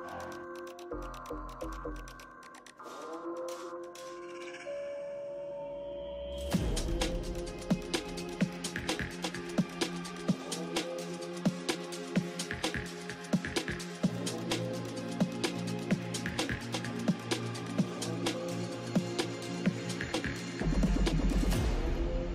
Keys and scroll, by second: 7.3 BackSpace, 9.9 f, 10.4 7, 10.9 f, 11.4 7, 13.6 6, 14.3 c.